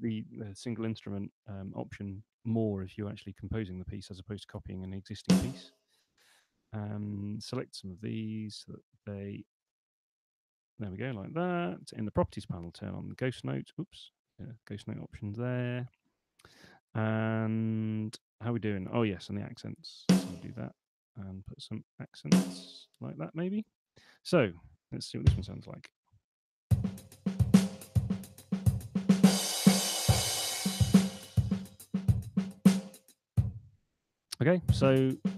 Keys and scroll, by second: 3.7 Return, 12.0 super+8, 15.5 super+8, 22.5 [, 22.7 [, 25.6 p, 33.6 space.